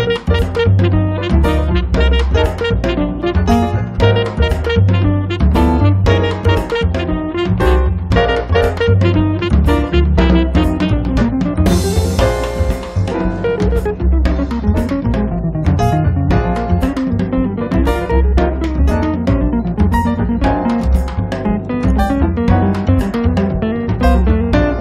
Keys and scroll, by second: 8.3 space, 11.1 m, 13.0 Up, 17.2 space, 17.8 Escape, 22.3 r.